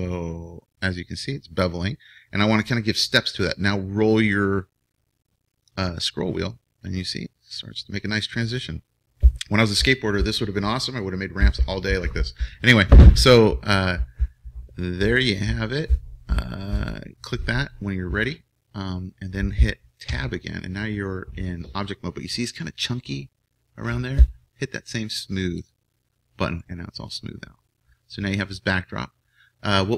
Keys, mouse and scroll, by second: 20.1 Tab, 21.9 middle click, 23.2 click, 23.5 middle click, 23.5 click, 25.5-27.5 drag, 27.5-28.9 middle drag.